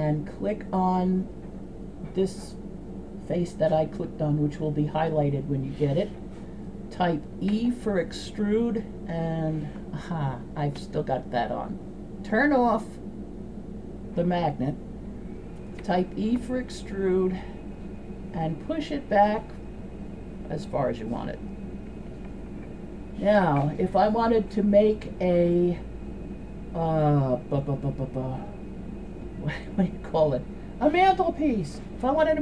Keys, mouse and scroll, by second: 0.1 right click, 7.6 e, 10.8 ctrl+z, 12.3 click, 15.8 e, 26.4-32.4 right drag.